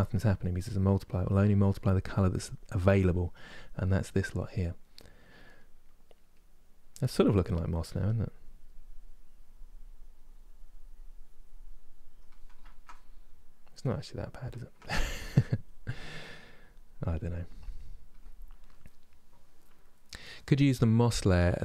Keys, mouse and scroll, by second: 0.9-5.2 drag, 5.2 middle click, 6.0-7.5 drag, 7.5 f, 7.9-12.3 drag, 12.3-14.8 ctrl+middle drag, 14.8-19.8 drag.